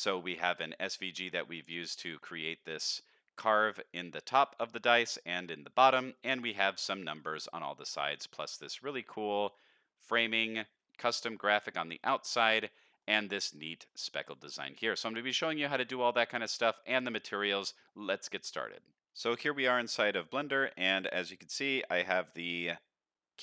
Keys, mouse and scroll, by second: 1.9 middle drag, 4.5-8.1 middle drag, 8.5-9.0 scroll up 1, 9.0-11.7 scroll up 1, 12.0-13.0 middle drag, 13.3 shift+middle click, 14.2-14.7 middle drag, 15.0-16.6 middle drag, 16.8-17.4 middle drag, 17.8-18.7 middle drag, 19.7-20.4 middle drag, 20.7-21.1 shift+middle drag.